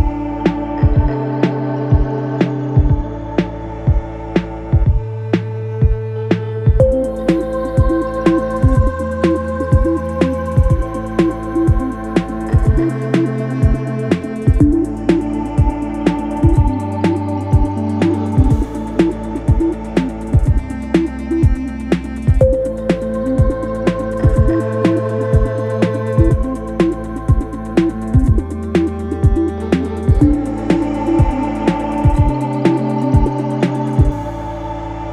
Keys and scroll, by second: 4.0 1, 9.7 Escape, 11.3 ctrl+z, 20.8 Delete, 24.3 F1, 30.0 F9, 31.7 ].